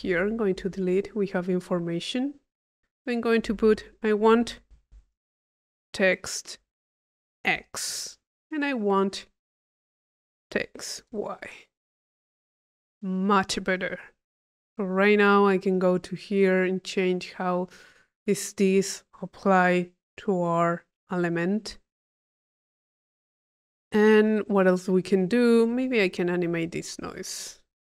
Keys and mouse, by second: 0.3 click, 3.2 click, 4.0 click, 9.0 click, 13.8-15.5 drag, 16.0-17.9 drag, 18.6 click, 19.8 click, 21.0-22.9 drag, 23.1 click, 24.9-26.6 drag, 26.8 click.